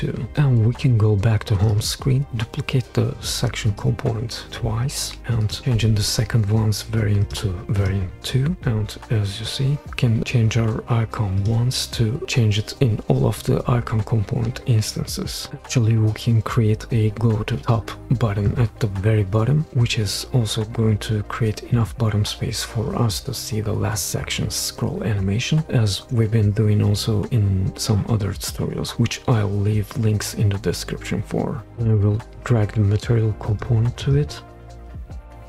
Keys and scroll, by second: 5.1 super+d, 8.5 super+z.